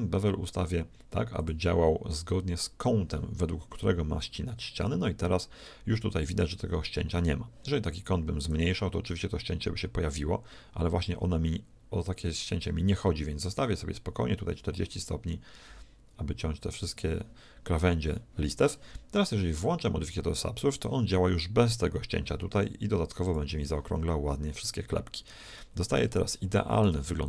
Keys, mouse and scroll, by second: 1.4-3.3 drag, 6.9-8.5 middle drag, 8.5-10.4 drag, 23.3 middle click, 24.2 click, 24.6 middle click, 24.8 click, 25.0 middle click, 25.0 click, 25.1 middle click, 26.7-27.2 middle drag.